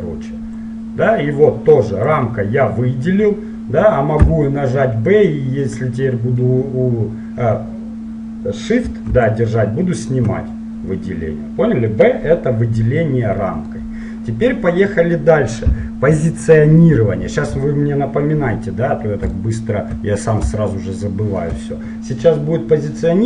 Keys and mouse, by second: 4.3 b, 13.9-16.6 middle drag, 18.3-19.5 middle drag, 19.5 right click.